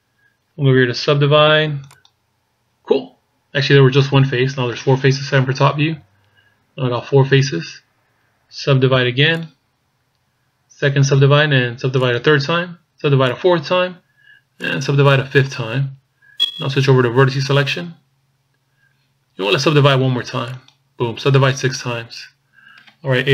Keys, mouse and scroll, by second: 1.8 click, 5.4 KP_7, 6.2-7.2 scroll down 1, 7.2-8.6 scroll down 1, 8.6 scroll down 1, 9.2 click, 12.0 click, 13.3 click, 14.6 click, 17.5 click, 20.5 click.